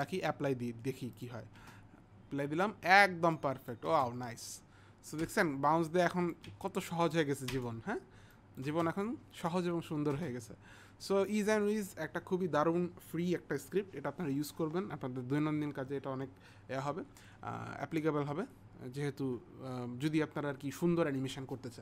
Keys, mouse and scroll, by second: 0.2 click, 1.2 click, 3.4 click, 5.9 click, 8.4 click.